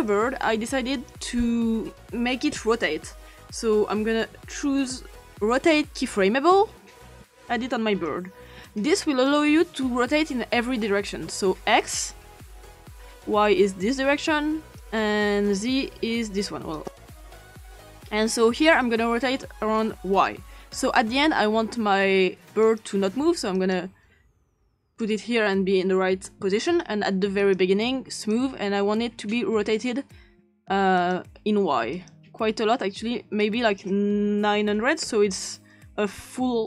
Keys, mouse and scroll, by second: 3.2-4.2 typing, 6.5-8.1 drag, 8.6 click, 11.8 click, 13.0 Return, 13.0 0, 14.8 Return, 15.5 click, 17.4 click, 18.1 typing, 18.5 Return, 22.6 click, 23.6 click, 24.8 click, 26.7 click, 28.2 click, 31.0 click, 31.9 click, 33.4 click, 34.2-35.3 typing.